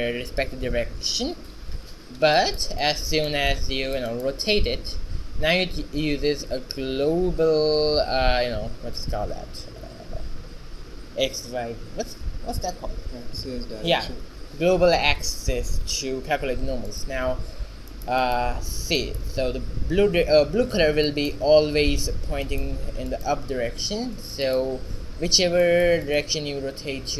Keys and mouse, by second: 1.8 shift+z, 2.5-3.7 middle drag, 4.3-6.1 right drag, 4.7 r, 18.1-21.2 middle drag, 18.8 shift+z, 23.2-24.6 right drag, 24.0 alt+g, 24.8 right click, 25.2 shift+z, 26.8 r.